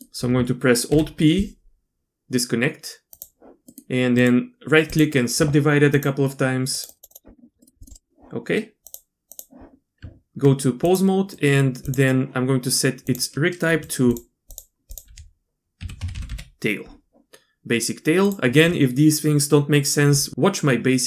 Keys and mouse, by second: 0.9 alt+p, 3.7 click, 4.2 click, 5.9 click, 6.9 click, 7.2 click, 8.8 click, 9.3 click, 10.0 Tab, 10.8 click, 11.3 click, 13.0 click, 14.5 click, 14.9-18.3 drag.